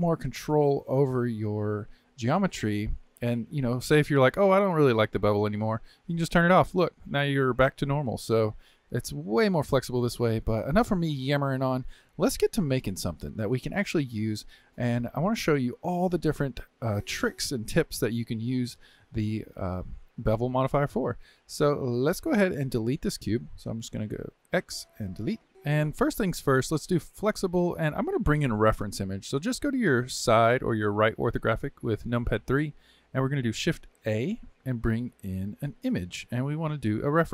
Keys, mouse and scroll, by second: 0.2-5.9 middle drag, 5.9 click, 6.7 middle click, 7.4-7.7 scroll down 1, 7.7-18.4 shift+middle drag, 20.4-23.4 middle drag, 23.4 Tab, 24.4 x, 25.5 click, 26.8 click, 29.4 KP_3, 33.5 shift+a.